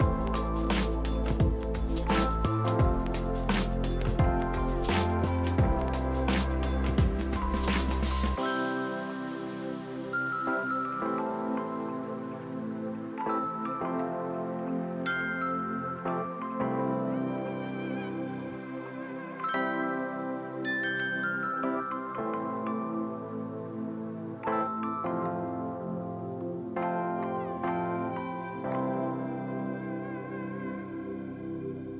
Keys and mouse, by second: 3.2 click, 3.6 ctrl+shift+x, 3.7 click, 4.6 KP_1, 4.7 Return, 5.7 v, 5.8 click, 6.5 right click, 6.7 click, 8.2 v, 8.4 click, 11.2 click, 11.4 alt+y, 13.2 click, 14.1 ctrl+click, 14.5 ctrl+click, 15.1 ctrl+click, 15.6 ctrl+click, 17.8 click, 21.1 ctrl+click, 21.7 y, 22.1 click, 23.1 Delete, 23.4 click, 23.7 Delete, 24.1 click, 24.4 Delete, 25.4 alt+y, 25.5 click, 25.6 alt+y, 25.7 click, 26.4 ctrl+click, 26.8 ctrl+click, 27.4 click.